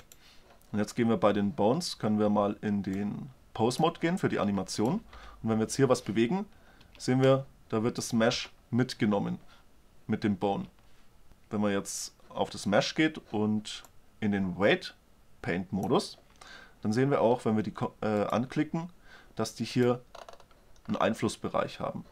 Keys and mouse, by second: 0.1-2.0 drag, 4.9 middle click, 5.1-6.8 drag, 5.3 g, 8.1-9.8 drag, 8.3 g, 11.3-12.5 drag, 13.9 click, 14.2 drag, 14.5 click, 14.6 click, 15.0 click, 18.3-21.6 drag.